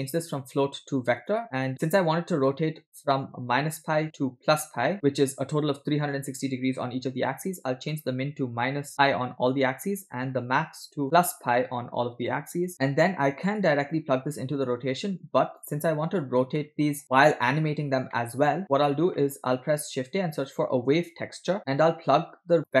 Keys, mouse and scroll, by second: 0.3-1.4 drag, 4.9 middle click, 7.4-9.6 shift+drag, 11.0 shift+click, 12.2 p, 13.1 middle click, 15.3 click, 16.6 scroll down 3, 16.6 middle click, 17.0 click, 18.3 middle click, 18.3 scroll down 1, 18.6 click, 19.2 middle click, 19.7 scroll up 2, 19.9 shift+a, 21.6-22.8 drag.